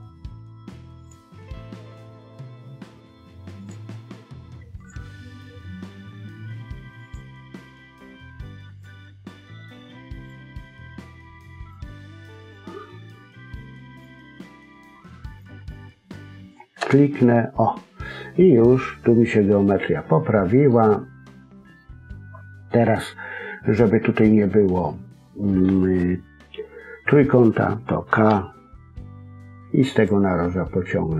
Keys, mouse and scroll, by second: 18.4-18.8 scroll down 3, 18.7 middle click, 20.8-21.1 scroll up 1, 21.1 middle click.